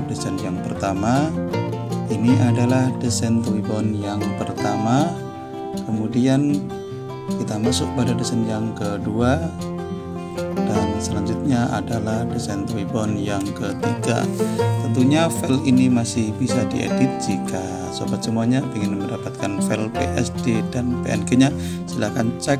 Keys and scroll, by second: 3.8 4, 16.8 t.